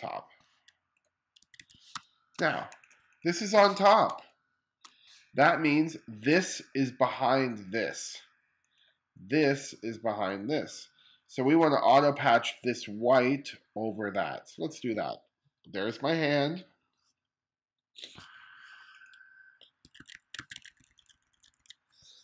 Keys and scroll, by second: 1.0 1, 1.5 space, 3.7 space, 19.4 1.